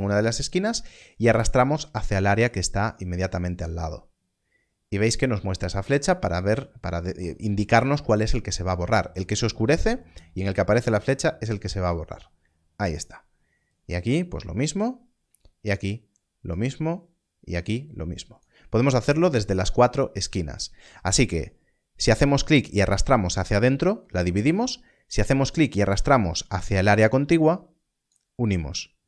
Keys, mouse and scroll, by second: 1.1 n, 1.1 click, 18.3 click, 22.2 click.